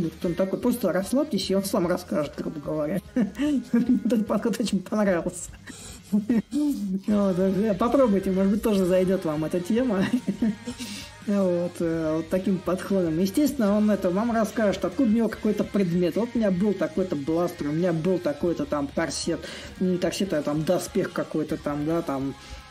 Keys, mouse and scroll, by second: 6.4-11.4 drag, 12.0-17.0 drag, 17.7-22.7 drag.